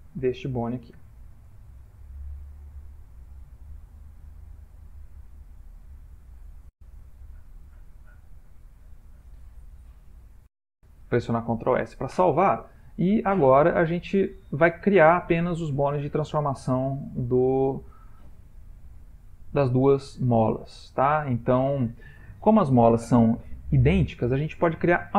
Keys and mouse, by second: 0.8 ctrl+p, 4.5-5.3 ctrl+middle click, 6.2 middle click, 10.2 ctrl+s, 11.1 shift+middle click, 13.8-14.2 middle click, 14.5 middle click, 17.5 middle click, 18.1 middle click, 19.8 middle click.